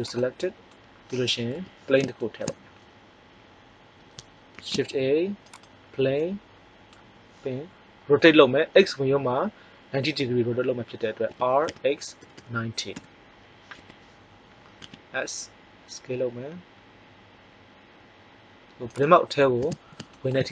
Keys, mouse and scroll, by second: 1.5 KP_1, 4.5 shift+a, 11.2 r, 13.7 KP_1, 14.7 s, 19.0-20.2 drag.